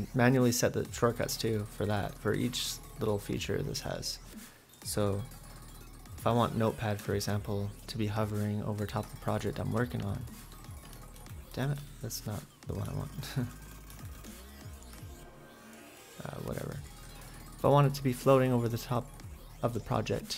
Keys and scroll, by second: 7.0 ctrl+super+z, 11.2-11.5 typing, 12.6-14.0 typing.